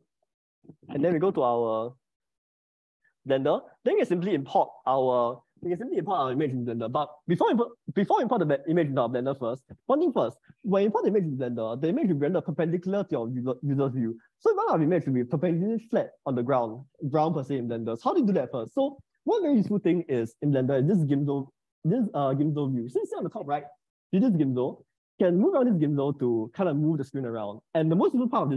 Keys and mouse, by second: 22.4-23.5 drag, 24.6-27.3 drag.